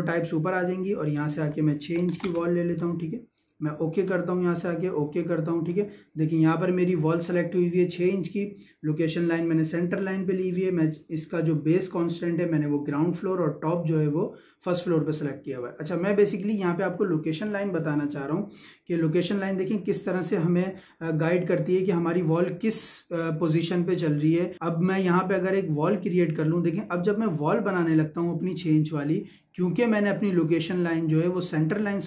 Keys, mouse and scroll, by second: 1.8 click, 3.3 click, 16.8-18.6 scroll up 1, 20.2-20.6 scroll up 1, 20.6 middle click, 26.4 click, 26.9 scroll up 1, 31.2 scroll down 1.